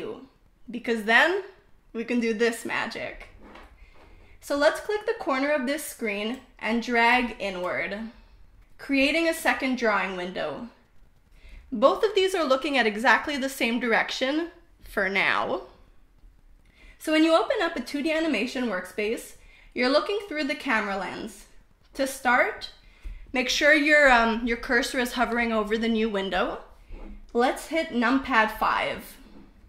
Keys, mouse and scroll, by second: 6.7 click, 8.3-11.8 drag, 28.8 KP_5.